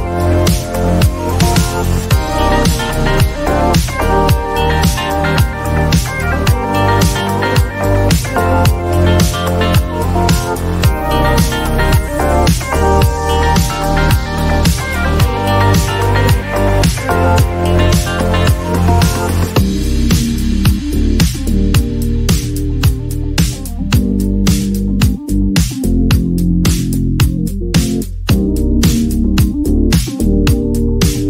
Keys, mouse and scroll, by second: 2.8 (, 4.2-5.4 typing, 7.2 click, 10.1 click, 12.4-14.1 typing, 15.9 Right, 16.1 Right, 16.9-20.1 typing, 21.4 ", 22.4 shift+a, 23.7 click, 24.6 click, 24.7 click, 26.8 click, 27.7-30.5 typing.